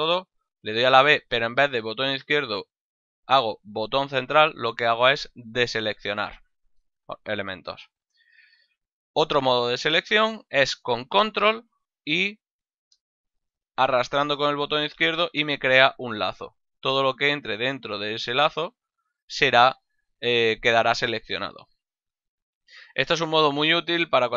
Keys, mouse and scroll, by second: 0.6 b, 1.5 middle click, 7.5 a, 12.5 click.